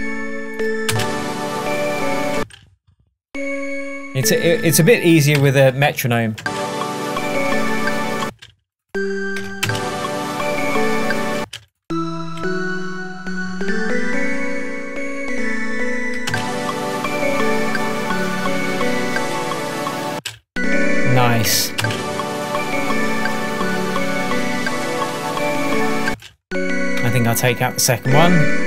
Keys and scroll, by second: 0.9 space, 2.4 space, 3.5 Left, 7.5 space, 8.3 space, 9.4 BackSpace, 11.4 space, 20.2 space, 21.6 super+d, 22.8 space, 26.1 space.